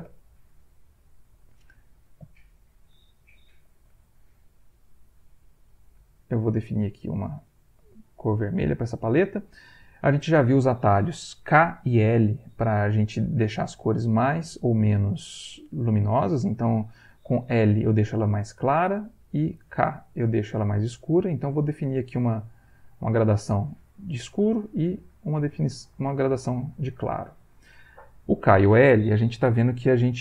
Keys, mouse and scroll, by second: 0.1 ctrl+z, 1.6-3.1 shift+middle drag, 3.6 ctrl+alt+v, 4.0 ctrl+alt+middle click, 4.8-6.1 shift+drag, 6.3-8.1 shift+drag, 16.1 click, 18.3 l, 19.2 k, 21.6 click, 22.1-23.3 drag, 24.5 l, 25.9-27.3 drag.